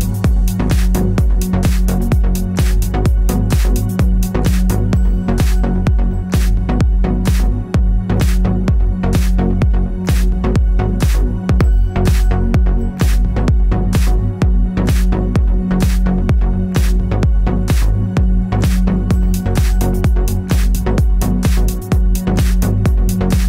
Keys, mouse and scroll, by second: 1.6 u, 3.2 right click, 5.1 click, 12.5 click, 17.2 click, 19.0 KP_Enter, 20.4 click, 21.2 KP_2, 21.6 KP_Enter, 23.0 click.